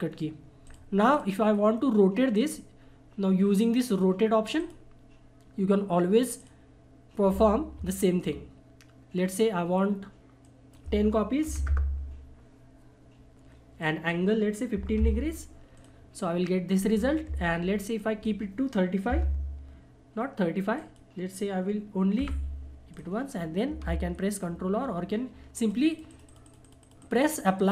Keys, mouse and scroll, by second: 0.6 click, 4.5 click, 4.6 click, 10.4 click, 13.8 click, 17.3 ctrl+z, 18.0 click, 20.8 click, 25.6-27.7 drag.